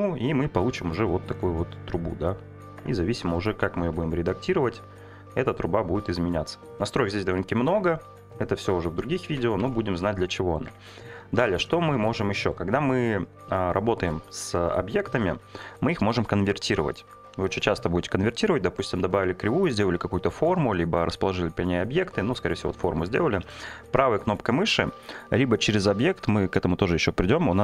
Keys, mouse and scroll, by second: 2.8 Tab, 3.3 click, 3.9 r, 7.5 click, 8.3 g, 8.9 click, 9.3 ctrl+z, 9.6 ctrl+z, 10.7 Tab, 11.3 shift+middle click, 23.4 right click, 25.9-27.6 drag.